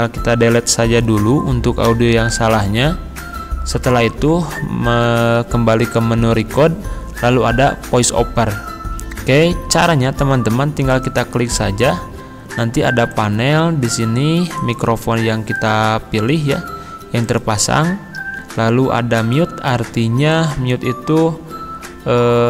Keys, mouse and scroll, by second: 1.9 Delete, 4.9 click, 10.9 click, 17.3 click, 20.3 click.